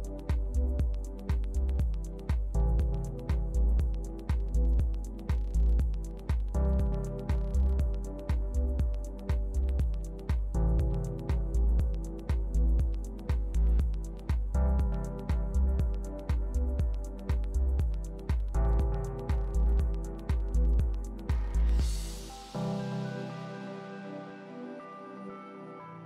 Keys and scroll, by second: 18.1 alt+u.